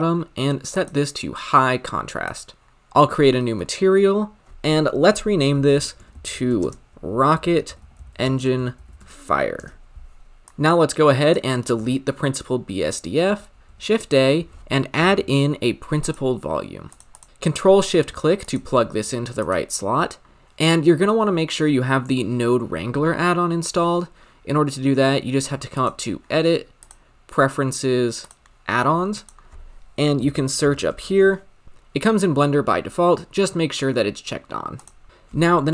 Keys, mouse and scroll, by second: 0.8-3.1 drag, 3.1-4.2 scroll down 5, 4.2 scroll down 1, 4.4 ctrl+z, 9.6-11.3 drag, 11.7 x, 16.1 shift+a, 17.1 click, 17.2 ctrl+z, 18.4 ctrl+shift+click, 19.4 click, 27.0-30.6 drag, 35.1 click.